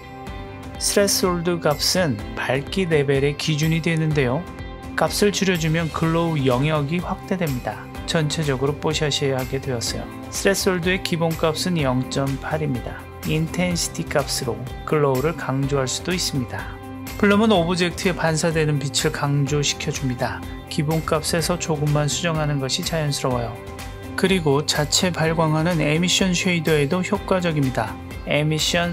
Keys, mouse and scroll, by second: 4.0 click, 7.4-14.7 drag, 16.9 click, 17.4 click, 21.9 click, 28.4-28.9 drag.